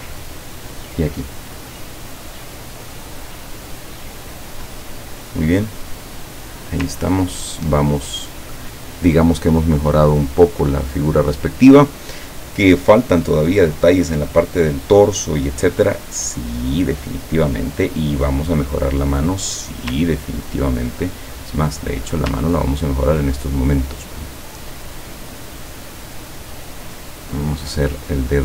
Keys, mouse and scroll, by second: 0.3 click, 7.1-7.6 ctrl+scroll down 2, 9.9 click, 18.7 middle click, 20.1-20.5 ctrl+scroll up 2, 21.9 click, 22.2-23.0 scroll up 6, 24.7 click, 25.3 click, 26.5-28.1 drag.